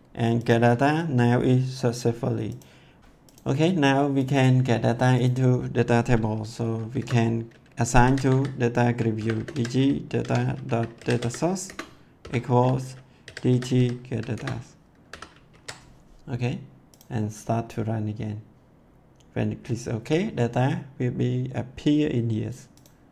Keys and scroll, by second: 3.0 ctrl+s, 6.9 Return, 7.7-9.5 typing, 10.2 Tab, 10.7-15.0 typing, 14.3 Return, 15.4 ctrl+s.